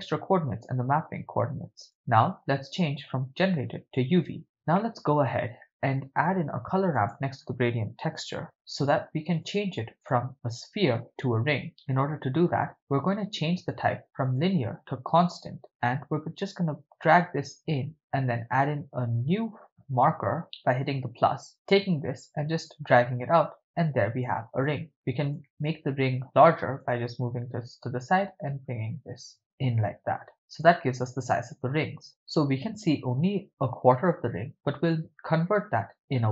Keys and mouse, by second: 2.0-4.3 drag, 4.8 middle click, 6.4 shift+a, 11.9-12.5 middle drag, 12.7-13.9 drag, 14.3-15.6 drag, 16.5-17.9 drag, 18.5 click, 20.4 ctrl+middle click, 21.7-24.5 drag, 24.7 click, 25.6-26.8 drag, 27.9-30.8 drag.